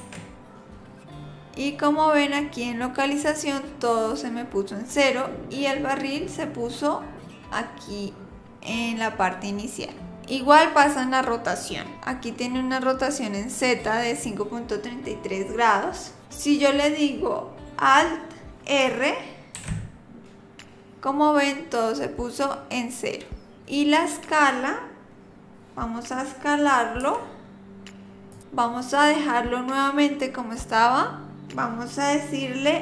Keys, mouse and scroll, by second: 19.6 alt+r, 27.0 s.